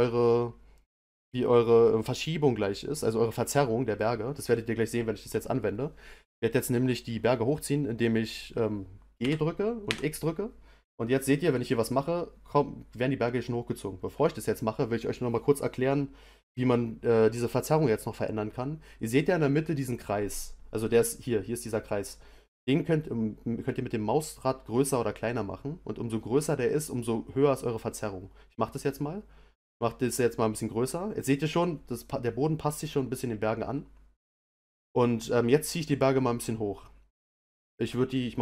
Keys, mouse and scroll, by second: 9.2 g.